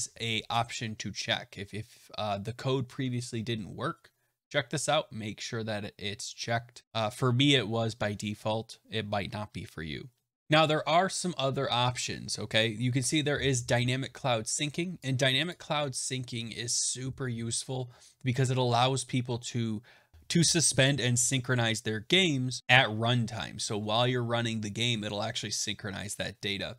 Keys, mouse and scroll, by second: 12.7-14.9 scroll down 3, 14.9 click, 15.4 click.